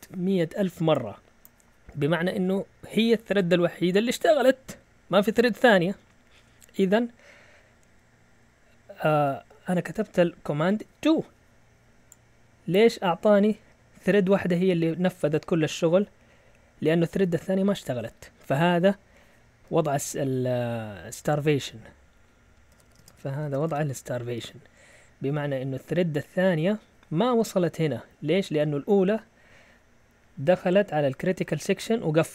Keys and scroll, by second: 9.2 Up, 9.4 Up, 9.8 Up, 20.9 Down, 21.1 Down, 21.3 Down, 21.5 Down, 22.5-26.4 typing.